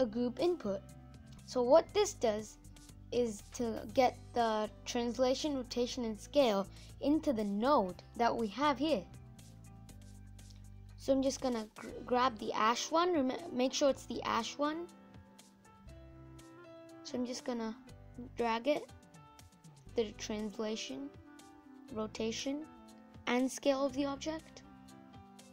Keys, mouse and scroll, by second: 12.4 click, 19.4 click, 21.9 click, 25.2 click.